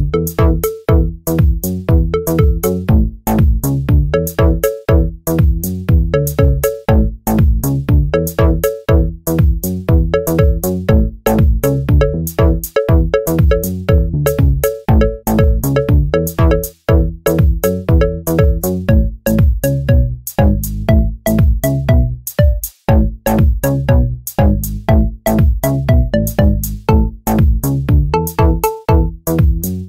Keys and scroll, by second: 10.2 Return, 10.8-12.9 typing, 28.0 Return.